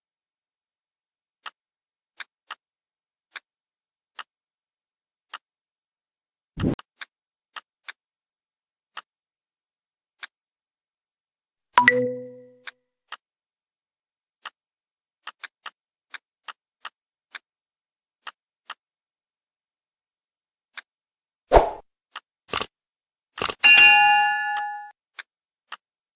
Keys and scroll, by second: 6.8 ctrl+z.